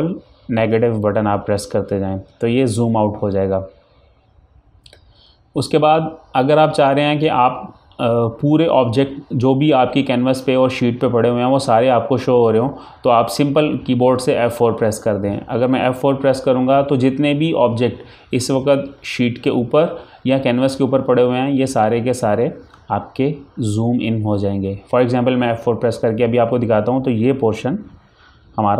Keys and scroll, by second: 1.0 ctrl+KP_Subtract.